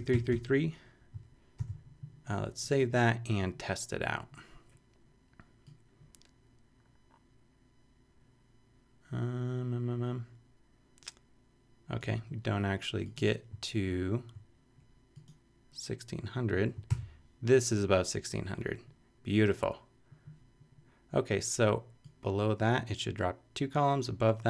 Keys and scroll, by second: 1.1 super+3, 1.6 super+s, 16.9 super+r.